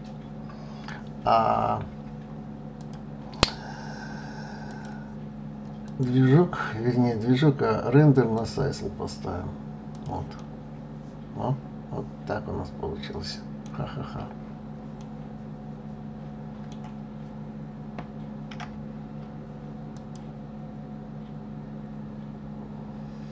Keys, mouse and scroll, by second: 2.3 click, 4.2 click, 5.4-8.4 drag, 9.5 click, 9.9-13.0 middle drag, 13.6-13.9 scroll up 1, 13.9 scroll down 2, 14.5-17.6 middle drag, 19.4 click.